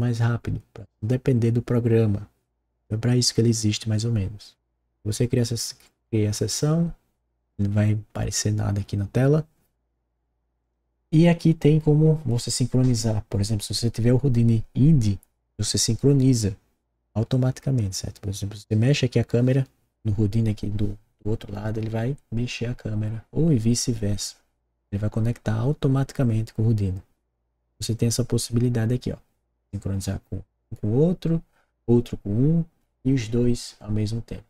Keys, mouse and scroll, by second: 6.4 click, 10.5 click.